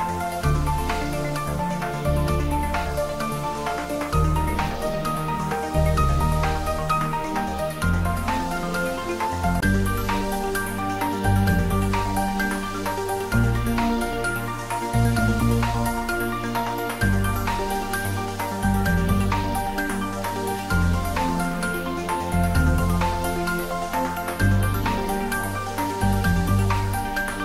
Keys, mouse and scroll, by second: 6.4 click, 7.3-7.8 scroll down 1, 7.8-8.4 middle click, 9.0 click, 9.4-10.6 scroll up 1, 12.2-14.1 scroll up 1, 14.5-14.9 typing, 16.6 Tab, 17.3 click, 21.5-23.1 middle drag, 23.3 shift+click, 23.8-24.7 middle click, 24.9 shift+click, 25.2-26.1 middle drag, 26.5 shift+click.